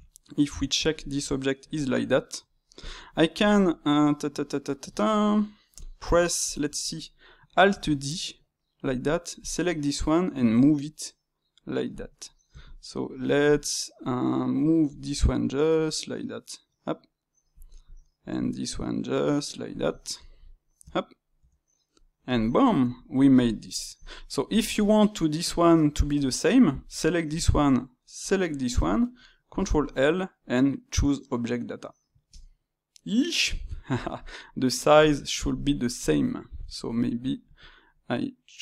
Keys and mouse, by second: 0.3-2.8 middle drag, 2.8 click, 3.0-5.7 ctrl+middle drag, 5.7 click, 6.1-7.7 shift+middle drag, 7.7 alt+d, 9.3 click, 10.4 g, 12.5 shift+click, 13.4-14.9 drag, 14.9 g, 17.8 click, 18.2 g, 20.1 ctrl+middle click, 20.7 Tab, 21.3 Tab, 21.9-25.4 middle drag, 25.4 click, 28.1 shift+click, 29.5 ctrl+l, 35.1-36.5 shift+middle drag, 36.5 click, 36.9-37.5 shift+middle drag, 37.5 s.